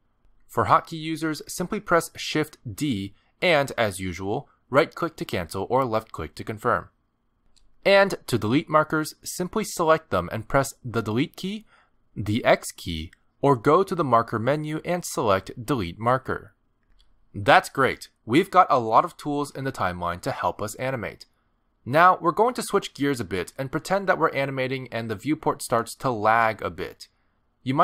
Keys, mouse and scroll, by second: 4.2 shift+d, 7.2 g, 8.6 click, 11.7 Delete, 13.2 click, 13.7 x, 14.9 click, 15.8 click.